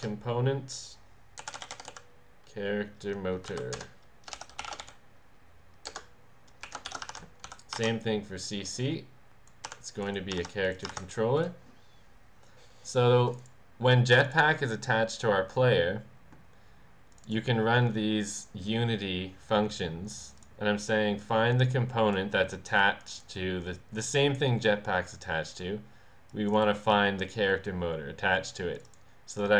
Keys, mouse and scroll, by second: 1.1-2.4 typing, 3.5 Down, 3.8 Return, 4.4-5.3 typing, 5.9 Return, 6.7 Up, 6.9 shift+End, 7.1 ctrl+c, 7.5 Down, 7.8 ctrl+v, 8.9 click, 9.7 c, 10.0 click, 10.4 ctrl+c, 10.7 click, 10.9 ctrl+v, 11.3 click, 13.3 click, 14.1 click, 17.1 click, 20.4 click, 21.2 click, 23.0 click, 26.3 click, 28.7 click.